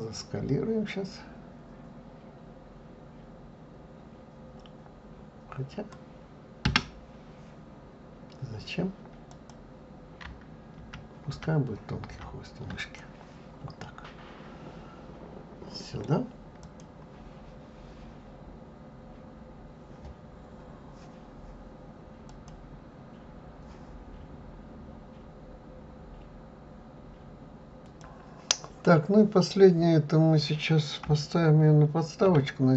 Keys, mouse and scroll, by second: 6.6 Escape, 9.3 click, 10.8 ctrl+z, 11.3 ctrl+z, 12.1 ctrl+z, 12.8 click, 13.8-16.6 middle drag, 16.6 click, 32.5 shift+s.